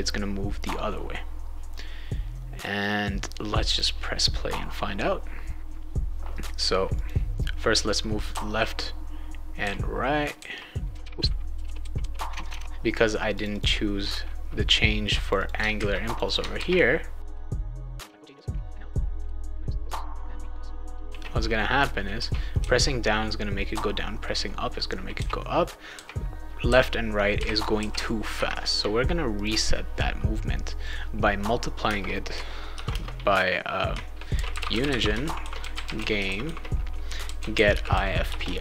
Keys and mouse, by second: 3.7 click, 7.0 click, 8.3 d, 9.6-12.6 typing, 13.3 click, 13.5 click, 15.2 click, 15.4 click, 15.7 ctrl+c, 16.1 click, 16.2 click, 16.5 ctrl+v, 17.3 ctrl+s, 17.8 click, 18.1 alt+Tab, 18.4 alt+Tab, 18.5-19.7 typing, 18.7 click, 19.8 click, 20.1 click, 21.1 ctrl+s, 22.2 s, 22.6 s, 23.7 w, 25.1-27.8 typing, 29.3 click, 30.8 click, 31.8 space, 32.7 shift+8, 32.9 space, 34.1-38.6 typing.